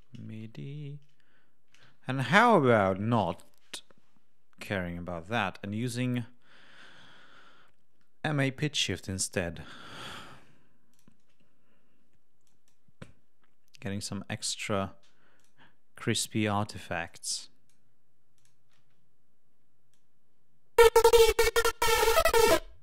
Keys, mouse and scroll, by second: 0.0-0.8 typing, 1.7 Escape, 3.1 right click, 6.6-7.1 scroll down 2, 10.8 click, 12.3 click, 14.4 right click, 15.2 click, 16.9 click, 18.2 click, 18.6 space, 19.8-21.5 drag, 22.7 click.